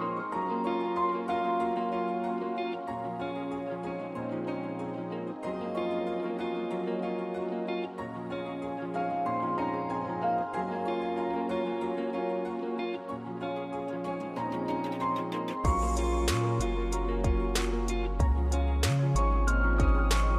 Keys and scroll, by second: 5.2-6.9 typing, 9.4-13.6 typing, 13.6 Return, 15.6 Left, 15.9 Return.